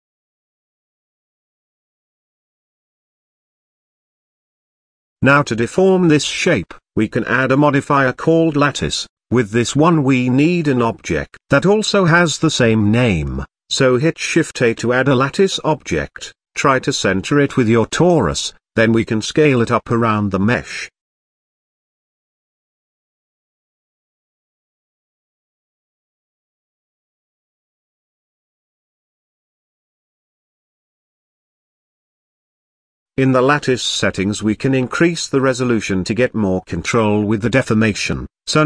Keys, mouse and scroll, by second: 0.4-0.7 scroll down 1, 0.7-3.2 shift+middle drag, 5.7 click, 6.6 click, 7.3-9.7 drag, 19.6 KP_1, 20.6 z, 21.5 g, 24.0 g, 25.4 s, 26.7 s, 29.2-30.1 middle drag, 30.1 z, 30.6-32.6 shift+middle drag, 32.6 click, 33.9-37.2 drag, 38.1 click.